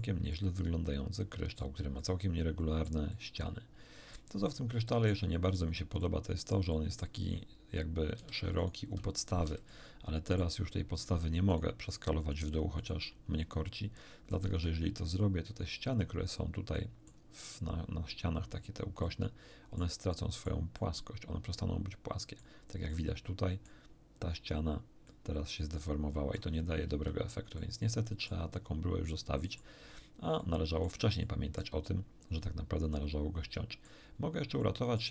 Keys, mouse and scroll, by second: 0.3-1.7 middle drag, 1.9-3.0 middle drag, 4.4 middle click, 5.4 scroll down 2, 5.9-7.1 middle drag, 8.1 a, 8.5 alt+shift+right click, 9.4 alt+shift+a, 9.6 alt+shift+middle click, 10.9 right click, 11.5 shift+right click, 11.9 shift+right click, 12.3 shift+right click, 12.7 shift+right click, 13.5 shift+middle click, 14.5 s, 16.3 click, 16.7 middle click, 19.0 middle click, 20.1 middle click, 20.7-22.5 middle drag, 22.9 middle click, 25.0-26.5 middle drag, 26.8 ctrl+z, 27.5 ctrl+middle click, 28.5-29.7 middle drag, 29.9 shift+scroll down 1, 30.3 shift+middle click, 31.2 shift+middle click, 32.9-34.0 middle drag, 34.2 scroll down 3, 34.5 shift+middle click.